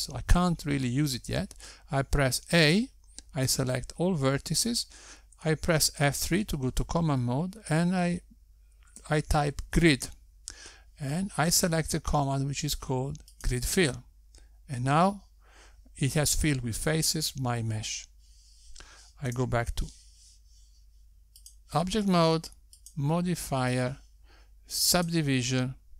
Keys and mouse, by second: 5.0 a, 8.2 F3, 21.8 Tab, 24.2 click, 25.5 click.